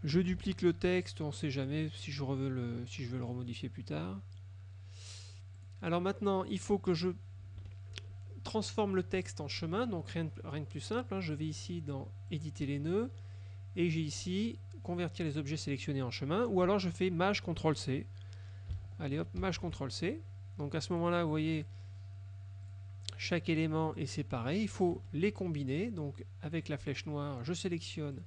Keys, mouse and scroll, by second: 0.4 ctrl+d, 1.0 ctrl+click, 3.3 middle click, 4.0 middle click, 5.7 click, 7.7 F2, 12.4 click, 19.5 ctrl+shift+c, 21.0 click, 21.6 click, 22.7 click, 23.4 click, 24.0 click, 24.6 click, 25.0 F1, 27.0 click.